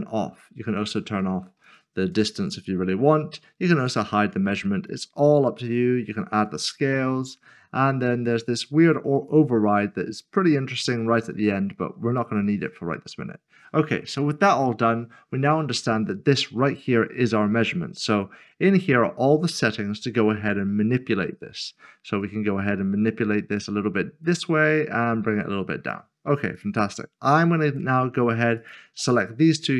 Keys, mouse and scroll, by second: 1.2 click, 3.1 double click, 3.8 click, 9.1 click, 11.3 click, 14.7 click, 17.6 click, 18.1 scroll down 1, 22.2 click.